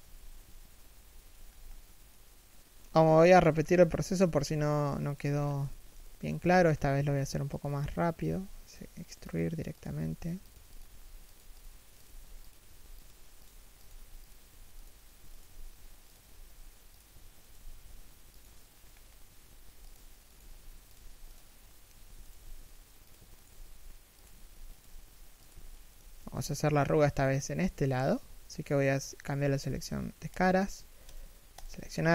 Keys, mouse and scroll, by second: 1.1 scroll up 1, 1.7 middle click, 2.5 3, 3.1 1, 4.0 z, 4.7 alt+right click, 5.0-5.3 scroll down 1, 5.3 alt+shift+middle click, 6.0 e, 7.9 e, 12.3 g, 15.0 alt+right click, 15.1 g, 17.1 alt+right click, 17.2 g, 18.5 scroll up 1, 19.4 e, 21.6 a, 21.9 alt+right click, 22.1 g, 23.1 alt+right click, 23.2 g, 24.4 alt+right click, 24.6 g, 25.3 alt+shift+middle click, 25.8 g, 26.2 a, 30.1 Tab, 30.7 alt+right click, 31.2 alt+shift+right click.